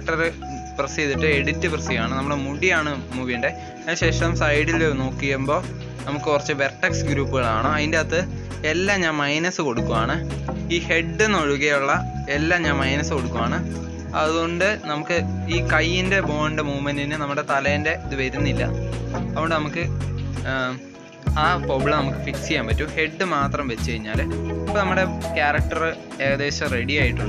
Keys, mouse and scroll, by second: 0.3 click, 0.6 Tab, 2.8-5.7 drag, 7.0-9.2 drag, 9.2 scroll up 1, 9.4 scroll down 4, 10.0-11.4 scroll down 9, 11.4 Tab, 12.3 click, 13.5 r, 14.3 click, 14.5 r, 16.0 click, 16.3 r, 17.2 click, 17.5 r, 18.5 click, 18.8 r, 20.2 click, 20.4 r, 21.1-21.9 scroll down 5, 21.9 click, 22.3 r, 23.3 click, 23.7 r, 25.4 Tab, 25.8 Tab, 26.4-27.2 drag.